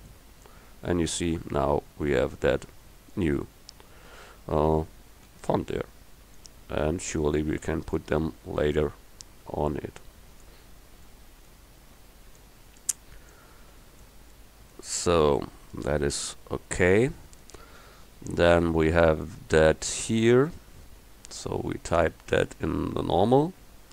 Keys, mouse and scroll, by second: 5.3 s, 11.1 middle click, 12.9-14.4 drag, 14.4-15.5 middle drag, 15.9 KP_1.